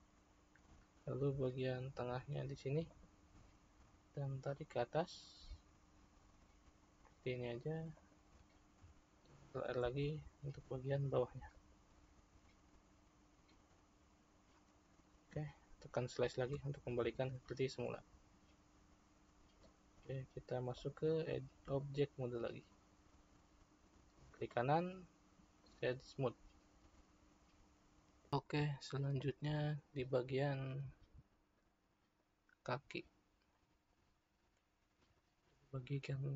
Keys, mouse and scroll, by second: 1.9 ctrl+r, 9.3 ctrl+r, 16.5 /, 20.8-24.5 drag, 24.5-28.3 right drag, 31.5-34.7 middle drag, 34.7-35.1 scroll up 1, 35.1-36.3 shift+middle drag.